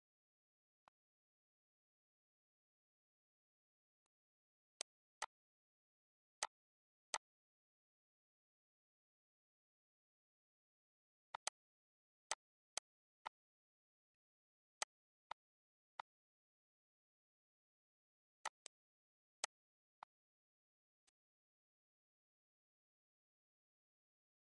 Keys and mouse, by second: 1.0 click, 1.6 click, 3.3 click, 4.0 click, 5.2 click, 6.6 click, 8.2 click, 9.1 click, 9.5 click, 10.9 click, 11.5 shift+click, 12.0 click, 12.6 click, 13.5 click, 14.3 click, 15.3 click, 16.2 click, 16.8 click, 17.1 shift+click, 17.8 click, 18.9 Right, 21.0 click, 21.9 click, 23.9 click.